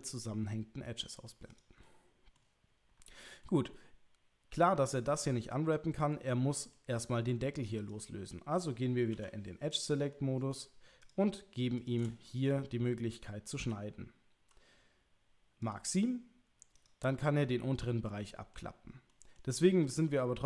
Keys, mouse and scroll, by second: 0.9 middle click, 1.5 click, 1.8 middle click, 3.4-5.1 middle drag, 5.7 middle click, 6.7 middle click, 7.9 click, 9.1 2, 10.1 middle click, 11.1 shift+click, 12.2 middle click, 13.7-15.7 right drag, 16.7 click, 18.1 middle click, 19.1 middle click.